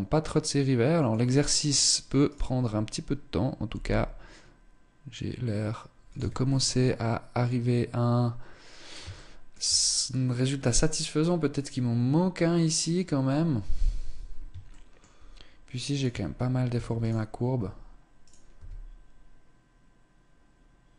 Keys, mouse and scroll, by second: 1.1-1.5 scroll down 2, 1.5 right click, 2.1 scroll up 2, 3.2 g, 5.7 Tab, 6.0-6.6 scroll down 2, 8.6 shift+middle click, 13.0-13.8 scroll up 1, 13.8-14.2 scroll up 1, 14.2 shift+middle click, 15.2 right click, 15.6 Tab, 16.2 Tab, 16.5 right click, 17.1 Tab, 17.8 right click, 18.0 s.